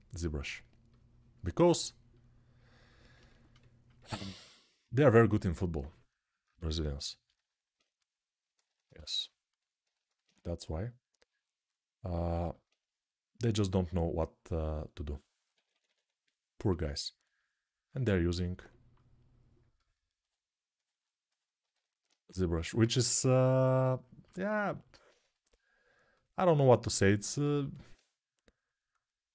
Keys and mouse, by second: 10.1 1, 15.3-17.6 middle drag, 15.3 [, 15.5 [, 17.6-29.3 alt+drag.